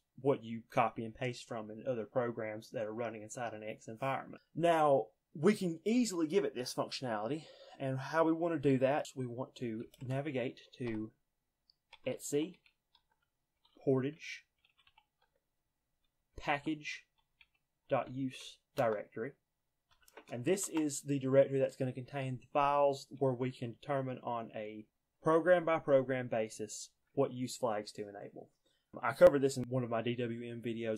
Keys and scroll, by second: 9.8-10.2 typing, 11.7-20.9 typing.